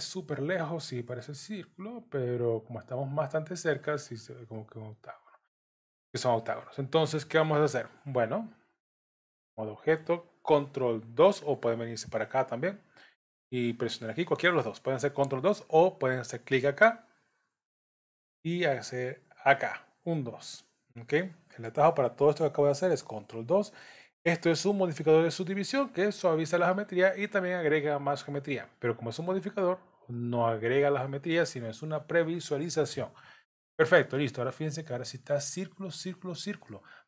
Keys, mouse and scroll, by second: 0.0-0.3 scroll down 6, 0.3 middle click, 1.6-1.9 scroll down 1, 2.7-3.2 scroll up 10, 3.8 middle click, 9.3 Tab, 12.2 click, 20.1 click, 25.7 middle click, 27.8-28.3 scroll up 2, 30.3 middle click, 33.4 middle click, 34.1 middle click, 36.7 shift+middle click.